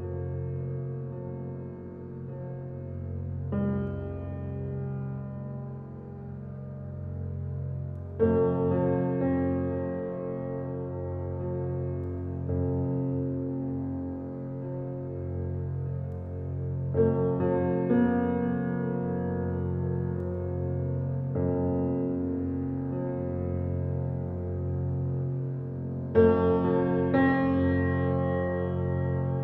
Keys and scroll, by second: 21.4 s, 21.9 g, 25.4 g.